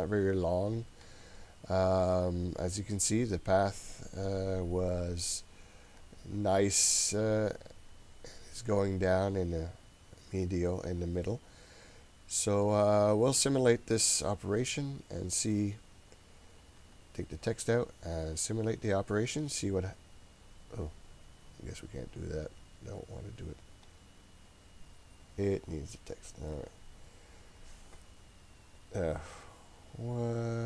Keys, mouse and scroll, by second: 16.8 click, 19.5-21.2 drag, 22.2 click, 23.9-27.3 drag.